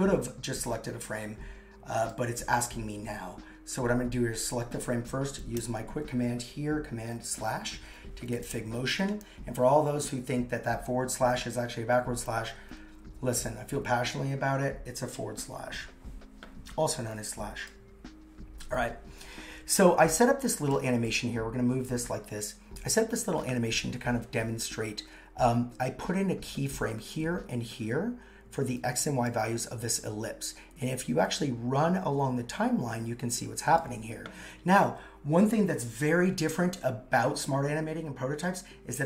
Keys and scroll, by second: 5.6 super+/.